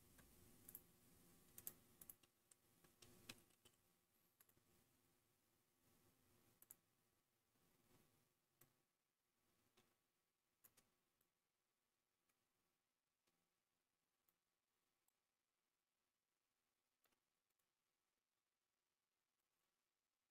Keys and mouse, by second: 1.7-4.4 drag, 3.4 BackSpace, 6.5 click, 8.6 click, 9.4-10.6 middle drag, 11.2-14.3 middle drag, 15.0-17.0 shift+middle drag, 17.4 click, 19.3-20.3 shift+drag.